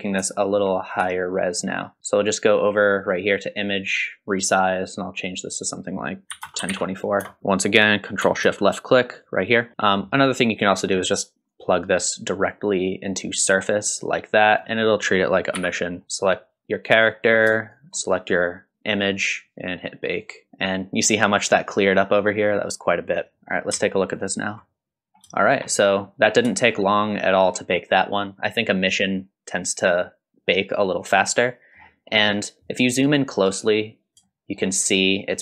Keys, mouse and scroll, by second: 0.3 shift+middle drag, 0.7 middle click, 1.1-1.6 shift+middle drag, 2.0 click, 3.0-7.4 drag, 7.4 middle click, 7.4-7.7 scroll down 1, 9.2 ctrl+shift+click, 9.8 scroll down 1, 10.1 middle click, 10.7 middle click, 11.5-13.3 drag, 14.5 click, 15.6 x, 16.0 middle click, 16.0 scroll up 2, 16.1 click, 17.6 shift+click, 20.1 click, 23.4 middle click, 23.4 scroll down 1, 24.2 ctrl+shift+click, 25.1 scroll up 2, 25.4 shift+middle drag, 25.8 scroll down 1, 26.1 middle click, 26.5 shift+middle drag, 26.9-27.2 scroll up 1, 27.2-28.5 scroll down 1, 28.5-31.8 middle drag, 33.7-34.2 scroll up 1, 34.2-34.6 shift+middle drag.